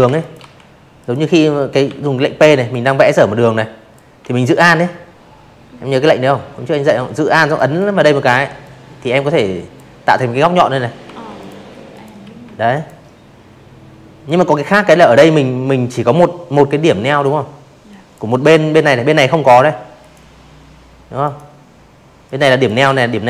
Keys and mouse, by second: 0.0 click, 4.5 alt+click, 5.6-6.7 drag, 8.0 v, 8.3 click, 8.9 click, 9.2 a, 9.7 click, 11.2 click, 14.2-15.1 drag, 17.0 click, 18.2 click, 19.2 click, 20.2 click, 21.6 click.